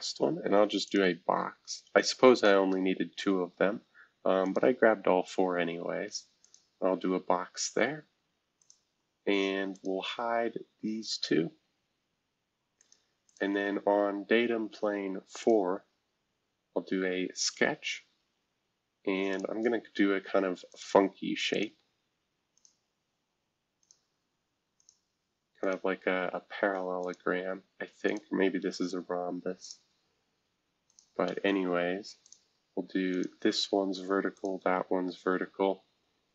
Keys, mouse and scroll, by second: 0.8-2.4 drag, 4.4 click, 6.4 click, 8.6 click, 9.7 click, 12.8 click, 13.3 click, 15.4 click, 17.0-19.0 scroll up 1, 19.3 click, 20.7 click, 21.5-26.1 drag, 26.1-27.0 scroll up 1, 27.0 click, 28.0 click, 28.7 Escape, 29.6 click, 30.9 shift+click, 32.2 click, 33.1 click, 33.4 v, 34.3 click, 34.6 v.